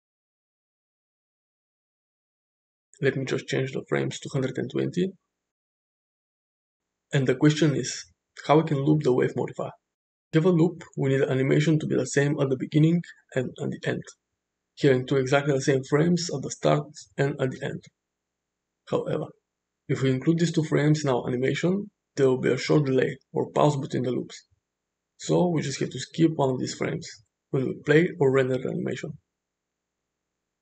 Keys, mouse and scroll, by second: 0.2 middle drag, 0.6 space, 4.0-6.1 drag, 6.2 space, 8.1-8.9 shift+middle drag, 11.4 shift+Left, 12.3 Left, 17.1 shift+Right, 21.4 click.